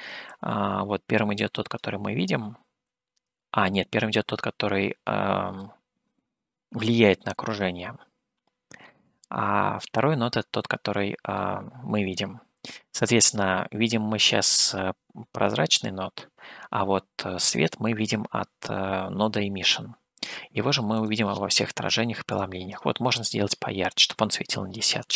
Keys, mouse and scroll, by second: 0.3-1.8 drag, 3.7-5.8 drag, 7.5 scroll down 1, 8.8-11.5 middle drag, 21.0-25.1 drag.